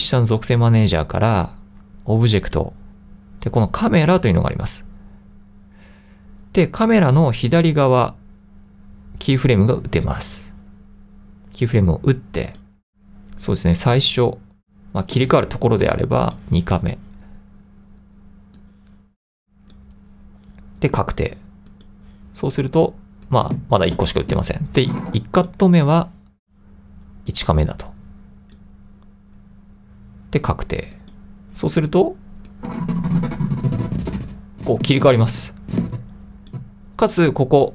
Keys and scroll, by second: 12.4-13.2 typing.